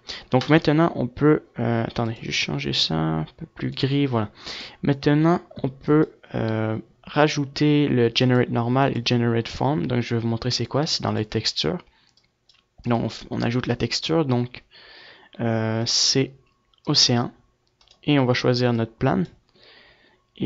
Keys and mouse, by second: 1.6-3.3 drag, 5.3-16.9 drag.